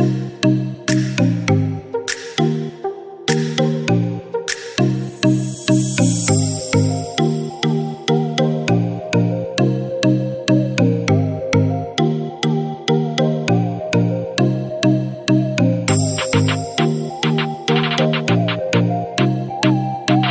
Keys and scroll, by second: 0.0 typing, 12.9 ], 17.0 ].